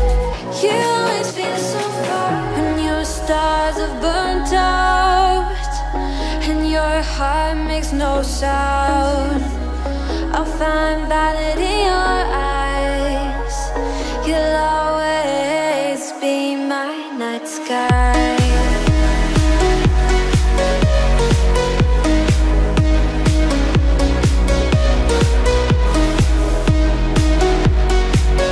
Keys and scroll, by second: 10.8 shift+i.